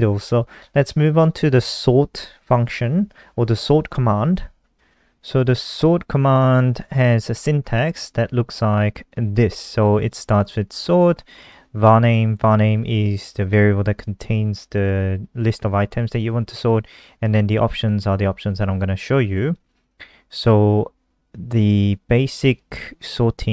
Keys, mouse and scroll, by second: 0.7 click, 1.6 Return, 4.7 ctrl+alt+r, 5.7 click, 7.5-9.4 scroll up 2, 9.4 click, 19.9 click.